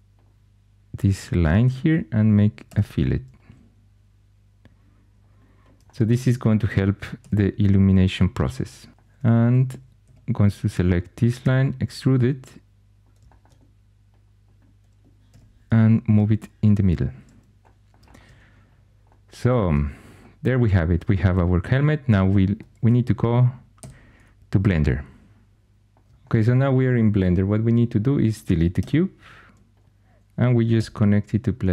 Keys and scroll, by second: 1.6 1, 2.6 b, 6.0 1, 7.1 g, 9.1 3, 10.0 2, 11.3 e, 15.2 g, 22.8 2, 23.7 x, 28.7 x, 30.6 n.